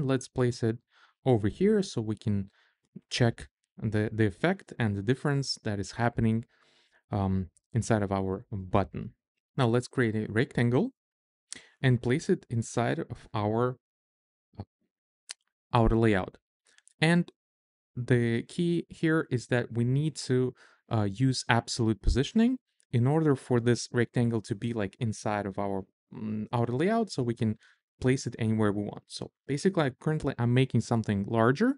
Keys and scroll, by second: 9.6 r.